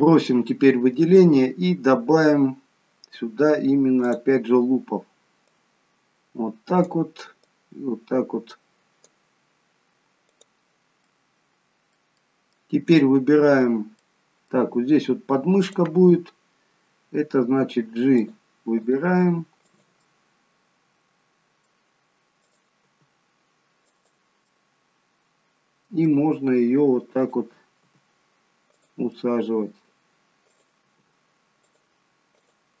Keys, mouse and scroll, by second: 4.0 click, 5.5 click, 10.3 click, 10.9 middle click, 12.2 middle click, 14.0 middle click, 15.6 click, 17.3 g, 19.0 click, 19.0 g, 20.0 middle click, 22.4 click, 22.8 g, 24.5 middle click, 27.2 click, 27.7 g, 29.1 middle click, 30.4 click, 30.8 g, 32.3 click, 32.7 g.